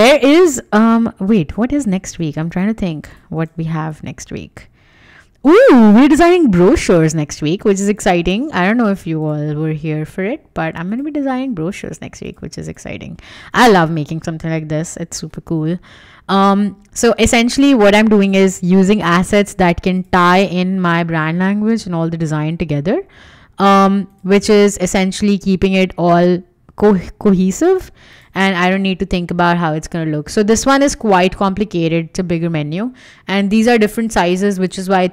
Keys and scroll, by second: 11.3 Escape, 13.5 BackSpace, 19.0 BackSpace.